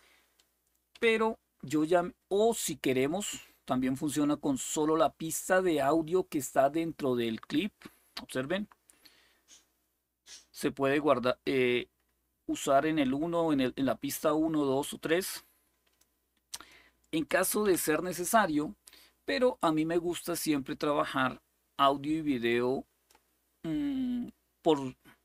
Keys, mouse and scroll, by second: 0.7 Delete, 5.3-17.3 drag, 17.4 Delete, 20.0-22.8 drag.